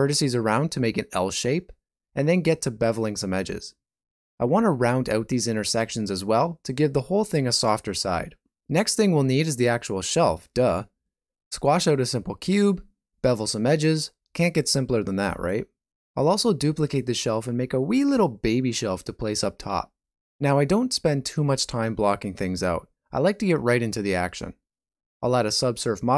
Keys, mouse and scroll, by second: 0.0 shift+click, 1.2 ctrl+b, 4.7 ctrl+b, 5.8 ctrl+b, 9.4 ctrl+g, 10.0 click, 10.7 ctrl+middle click, 11.4 shift+middle click, 12.6 g, 14.8 shift+middle click, 15.7 alt+z, 16.0 click, 16.6 middle click, 17.3 shift+click, 17.9 alt+z, 18.0 middle click, 18.7 g, 20.7 alt+a, 20.9 Tab, 21.1 middle click, 21.6 alt+a, 21.8 shift+middle click, 22.6 middle click, 24.9 click.